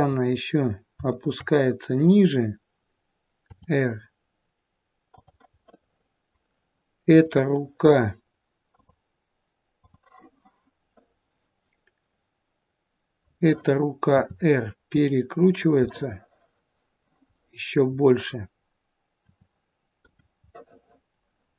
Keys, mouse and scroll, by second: 0.0 click, 1.1 shift+click, 3.5 r, 5.6 middle click, 7.1 click, 9.9 click, 10.9 middle click, 14.1 r, 15.7 middle click, 17.2 middle click, 17.8-19.0 scroll up 3, 19.0 scroll up 1, 19.1 r, 20.4 middle click, 21.4-21.5 scroll down 3.